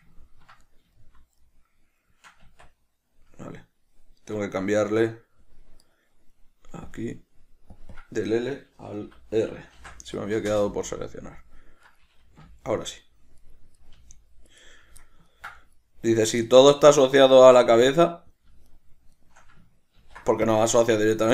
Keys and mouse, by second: 0.3 ctrl+middle click, 2.6 Tab, 6.0 right click, 7.0 click, 7.9-12.0 drag, 10.7 Return, 12.0 right click, 12.6 g, 13.9 right click, 14.0 g, 14.7 right click, 15.4-16.2 ctrl+middle drag, 16.2 right click, 16.6-18.9 ctrl+middle drag, 17.5 Tab, 18.9 shift+right click, 19.3 shift+right click, 20.1 ctrl+p.